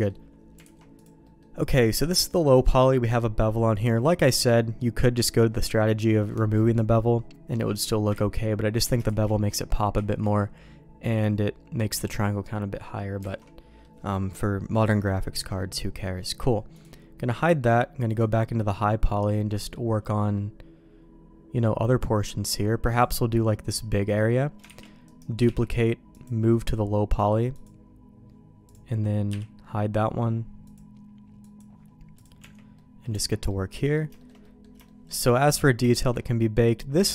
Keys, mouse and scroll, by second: 0.6 alt+a, 1.2 middle click, 6.5 click, 8.1 ctrl+z, 9.0 ctrl+shift+z, 9.9 ctrl+z, 12.5 middle click, 13.3 alt+a, 13.3 middle click, 16.7 click, 18.0 click, 18.4 middle click, 19.5 middle click, 20.3-21.6 middle drag, 22.9 click, 23.7 middle click, 24.7 shift+d, 25.4 m, 27.5 click, 28.6 click, 29.2 h, 30.6 click, 31.4 click, 32.1 click, 32.3 Tab, 32.7 middle click, 33.1 Tab, 33.4 middle click, 34.1 shift+middle click, 34.4 middle click, 34.8 click, 35.1 click, 35.8 click.